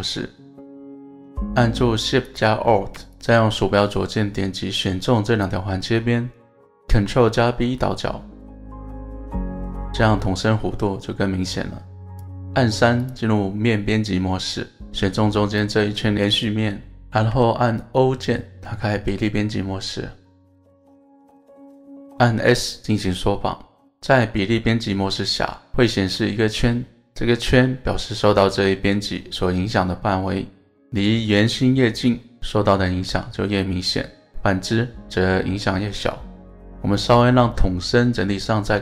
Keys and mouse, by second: 1.5 alt+shift+click, 2.3 click, 3.2 alt+shift+click, 4.1 alt+shift+click, 7.4 ctrl+b, 12.1 click, 13.0 click, 15.6 alt+shift+click, 22.2 s, 36.0 click, 36.9-38.8 middle drag.